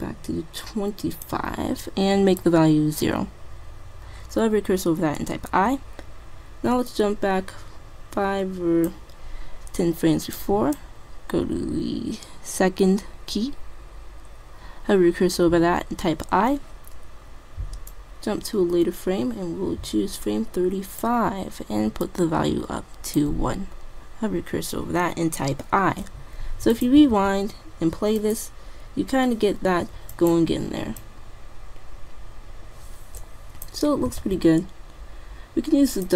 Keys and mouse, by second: 2.5-4.1 drag, 4.1-5.5 middle drag, 5.5 i, 6.9-8.7 drag, 8.9 typing, 10.2-11.0 typing, 10.5-12.3 drag, 18.0-19.8 drag, 22.1-23.9 drag, 26.9 click, 27.2 alt+a, 30.2-32.0 drag, 34.3 alt+a, 35.9 click.